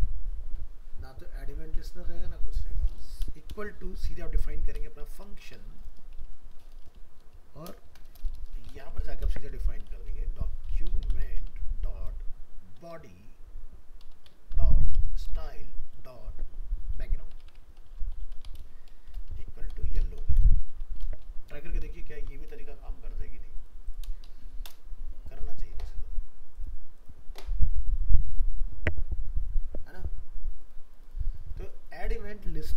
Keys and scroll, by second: 22.1 ctrl+s.